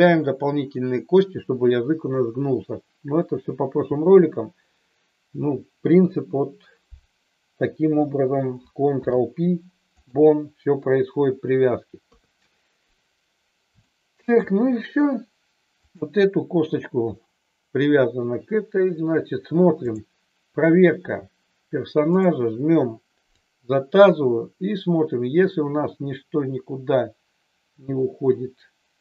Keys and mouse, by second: 8.9 ctrl+p, 12.1 KP_3, 13.8-14.3 shift+middle drag, 15.9 drag, 19.8 click, 23.3-29.0 drag.